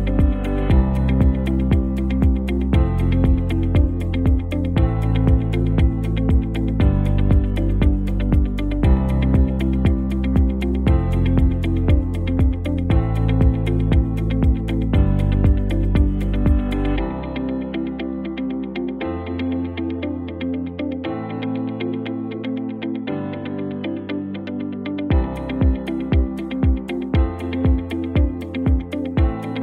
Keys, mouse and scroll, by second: 0.6 click, 1.2 alt+scroll down 1, 2.8 click, 4.9 shift+click, 5.7 ctrl+g, 7.2 click, 8.7 alt+scroll up 1, 9.5-10.8 shift+drag, 10.8 space, 12.6 space, 13.6 click, 16.5 space, 16.7 click, 17.0-17.8 space, 17.8-18.6 alt+scroll down 2, 18.6 v, 19.3-21.4 drag, 21.8 ctrl+t, 22.2 Right, 23.5 Return, 23.9 space, 24.1 click, 24.3-24.6 space, 24.7-25.4 scroll down 2, 25.6 space, 25.9 click, 26.1-26.4 space, 26.6 alt+scroll up 1, 27.4-28.4 alt+click, 28.6 space, 28.7-29.6 click, 29.0 space.